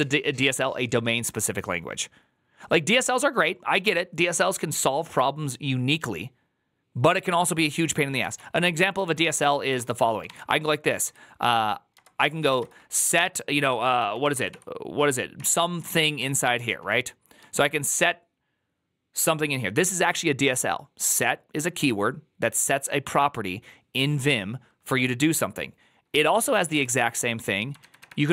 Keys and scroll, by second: 8.1 alt+{, 9.0 ctrl+w, 9.1 ctrl+o, 9.6 alt+f, 10.1-14.7 typing, 15.2 Tab, 15.4 Tab, 15.6 Tab, 15.8 Tab, 16.2 Tab, 17.2-17.9 typing, 26.2 ctrl+c, 26.4 ctrl+c, 26.6 ctrl+c, 27.6 ctrl++, 27.8 ctrl++.